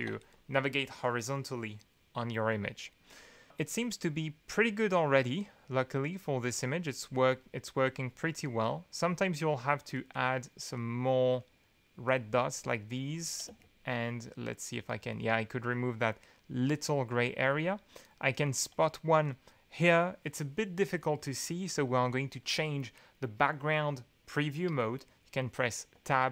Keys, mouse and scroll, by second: 5.2-6.3 scroll up 1, 6.3-8.3 scroll up 3, 7.1 click, 7.8 click, 8.3 middle click, 9.9 right click, 10.7 right click, 12.0 click, 12.6 click, 13.5 space, 14.8 click, 15.3 middle click, 18.0 middle drag, 18.0 drag, 18.2-18.5 middle drag, 25.9 Tab.